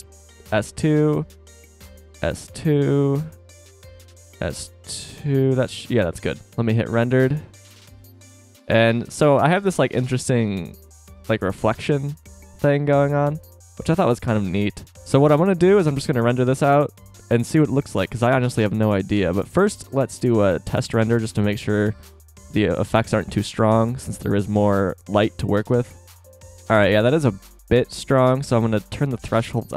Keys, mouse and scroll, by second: 1.0 s, 4.8 KP_0, 18.7 z, 22.3 Tab, 26.3 F12, 29.0-29.7 drag.